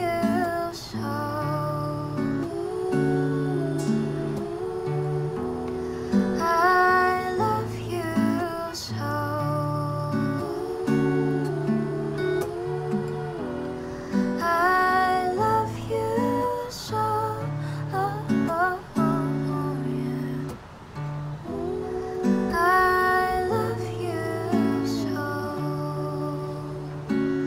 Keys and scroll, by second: 9.4 0, 9.8 Return, 13.4 F9, 19.2 space, 22.6 space.